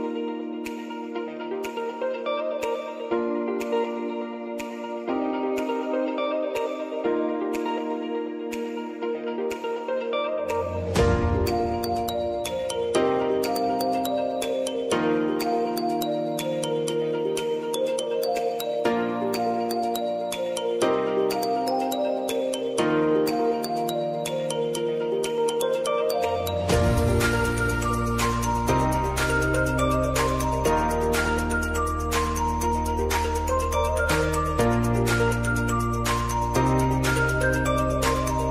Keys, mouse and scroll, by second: 0.3-13.1 drag, 14.3 Return, 15.0-17.7 drag, 18.2 ctrl+d, 19.2-22.4 drag, 22.4 s, 23.3-29.0 drag, 29.0 t, 29.8 click, 30.8 Return, 31.8 `, 33.4 click, 34.3 u, 35.6 click.